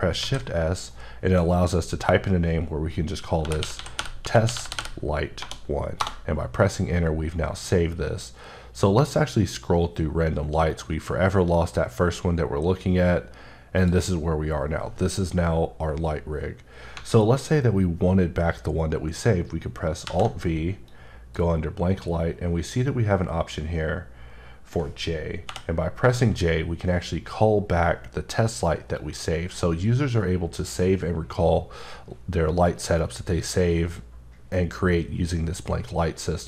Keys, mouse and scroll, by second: 0.0 s, 3.4-5.4 typing, 6.0 Return, 8.2-8.5 scroll up 3, 9.0 scroll up 2, 10.2-10.6 scroll up 4, 11.2 scroll up 1, 12.4-13.2 scroll up 3, 13.8 click, 16.9 alt+Num_Lock, 16.9 alt+click, 20.0 alt+v, 20.8 click, 25.7 j, 29.2 click.